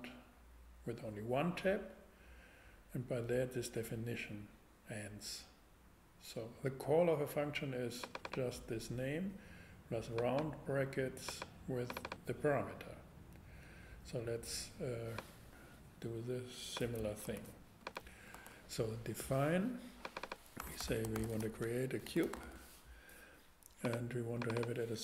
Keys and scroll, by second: 17.2 super+c, 17.8 super+c, 18.3 super+v, 20.6-22.4 typing.